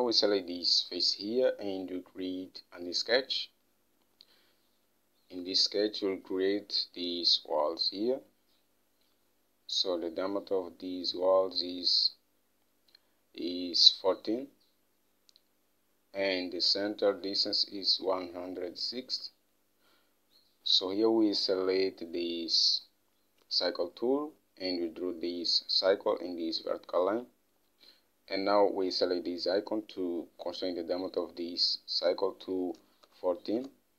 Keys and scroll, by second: 5.8 alt+Tab, 19.4 alt+Tab, 33.2-33.9 typing.